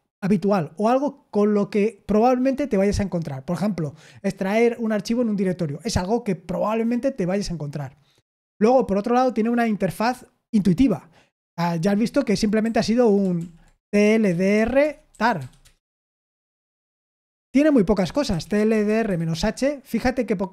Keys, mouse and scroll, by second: 13.3 super+l, 13.5-15.8 typing, 18.0-19.5 typing.